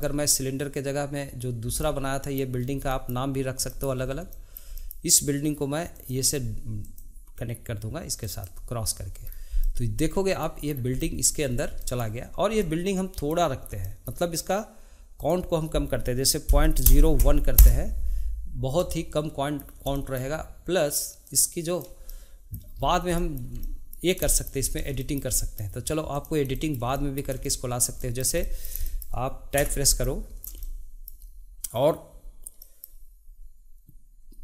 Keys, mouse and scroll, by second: 2.6 scroll up 2, 2.9-4.0 shift+middle drag, 4.0 scroll up 1, 4.3-5.9 shift+middle drag, 5.9 click, 6.8 click, 9.2-9.6 scroll down 2, 9.6-10.6 middle drag, 10.6 scroll down 2, 10.9-11.4 middle drag, 11.4 scroll up 1, 11.8-15.2 shift+middle drag, 15.2-18.2 drag, 18.8-21.2 middle drag, 21.2 click, 22.1 middle click, 22.8 scroll up 3, 23.1-24.6 shift+middle drag, 24.6-25.0 scroll up 2, 25.0-26.1 shift+middle drag, 26.1 click, 26.5-29.6 shift+middle drag, 29.6 Tab, 30.0-34.4 middle drag.